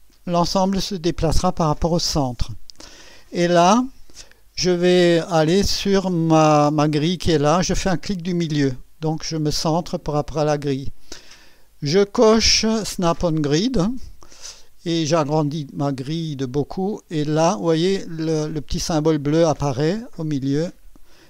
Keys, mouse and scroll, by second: 8.1 middle click, 9.1-10.0 scroll up 2, 13.9 click, 14.7 scroll up 2, 15.4 scroll up 2, 20.2 click.